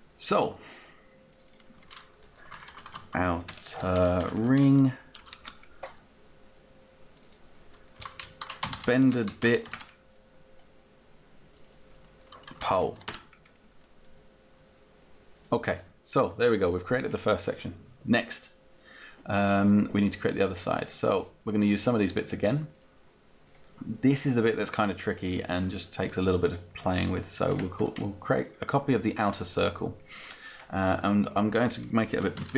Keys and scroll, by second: 2.2-5.3 typing, 5.4 Return, 8.0-10.2 typing, 12.3 o, 12.7 l, 13.0 Return, 31.8-32.5 typing.